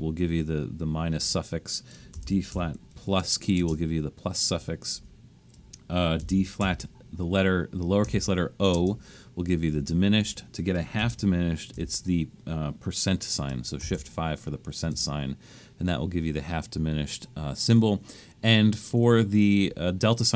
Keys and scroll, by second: 1.1-4.9 typing, 6.0-11.7 typing, 13.8 shift+5, 14.8 space, 16.7 typing, 18.9 BackSpace, 19.6 BackSpace.